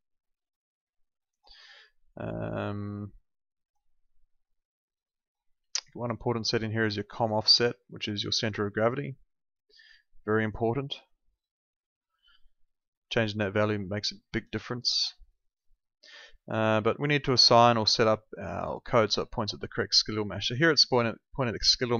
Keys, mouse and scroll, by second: 6.6 click, 17.4 click.